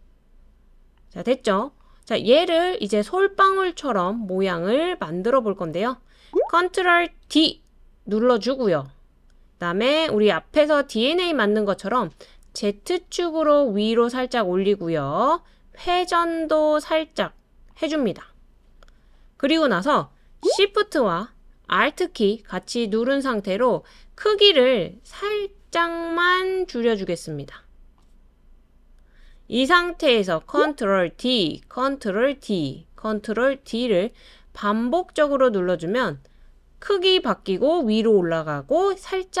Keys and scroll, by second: 7.3 super+d, 31.1 super+d, 32.4 super+d, 33.6 super+d, 34.9 super+d, 36.2 super+d.